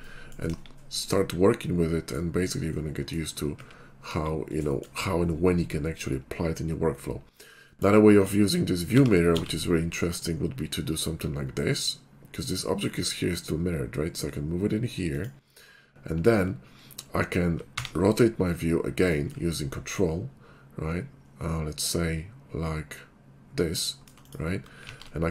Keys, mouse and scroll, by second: 1.3 middle click, 2.5 middle click, 2.9 middle click, 4.7 shift+middle click, 7.6 shift+2, 8.9 g, 9.4 x, 15.2 click, 17.9 ctrl+q, 20.6 ctrl+middle click, 21.2 middle click, 21.2-23.1 scroll up 63, 21.5 middle click, 23.1-23.9 ctrl+scroll, 23.3 ctrl+middle click, 24.3 click, 25.0 alt+x.